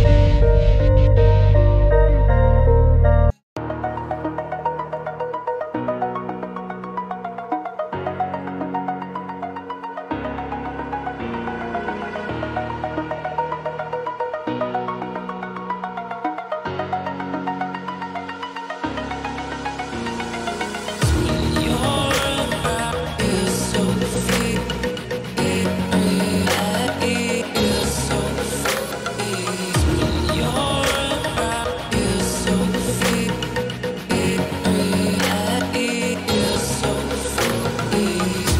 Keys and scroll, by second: 3.2 ctrl+-, 29.9 ctrl+g.